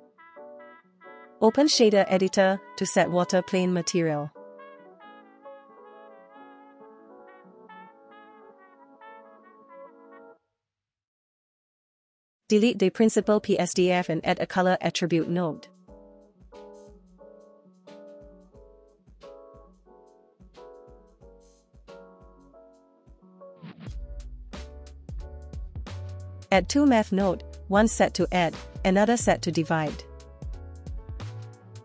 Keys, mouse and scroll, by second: 1.3-2.9 drag, 3.6 middle click, 4.7 click, 5.0-6.0 scroll up 2, 6.0 click, 11.1 p, 12.3 Delete, 13.6-14.2 middle drag, 14.5-14.9 shift+middle drag, 15.1 middle click, 16.2 click, 16.3 shift+a, 17.8 Down, 19.3 click, 21.1 middle click, 23.6 click, 25.3 middle click, 28.3 click, 28.6 shift+a.